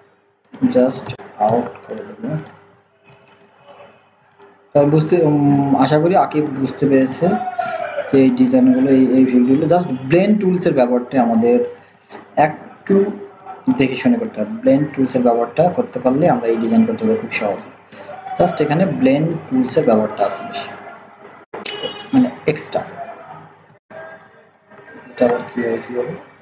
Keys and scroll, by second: 24.9 ctrl+z.